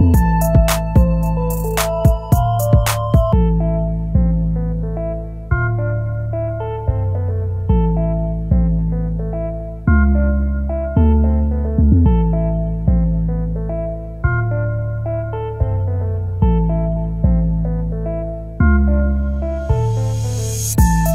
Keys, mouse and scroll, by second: 13.9 shift+click, 18.5 shift+click, 19.8 shift+click, 20.2 c.